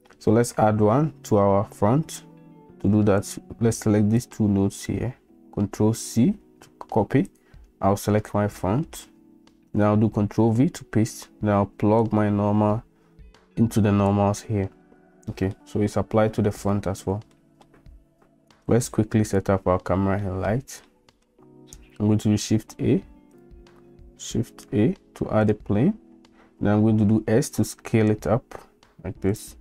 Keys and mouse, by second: 3.3-4.3 drag, 5.9 ctrl+c, 7.3 click, 10.1 ctrl+v, 12.0-14.1 drag, 15.5-15.9 middle drag, 17.3-17.6 middle drag, 18.8 click, 20.2 shift+middle drag, 20.8-21.2 middle drag, 22.6 a, 24.4 shift+a, 26.8 s.